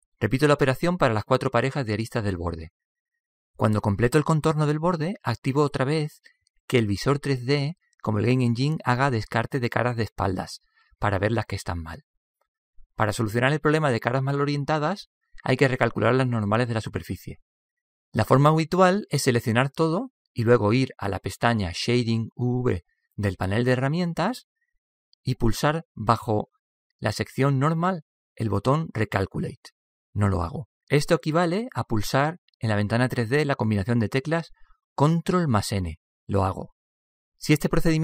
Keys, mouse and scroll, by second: 2.2 f, 3.5-8.2 right drag, 4.1 middle click, 5.4 middle click, 5.8 middle click, 7.4 f, 10.8-12.9 drag, 12.7 middle click, 18.7-20.5 drag, 20.5 a, 20.8 a, 22.5-27.9 drag, 35.4 ctrl+n, 37.6-38.0 middle drag.